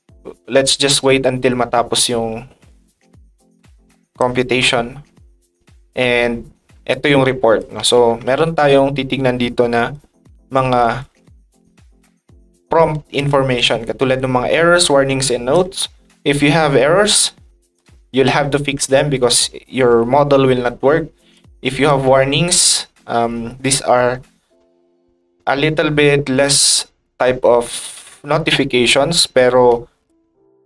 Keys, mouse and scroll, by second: 3.3 click, 4.2-6.1 drag, 6.9 click, 8.5 ctrl+click, 13.1 click, 14.0-15.5 drag, 17.2 ctrl+shift+click, 21.3 ctrl+shift+click, 30.0 ctrl+shift+click.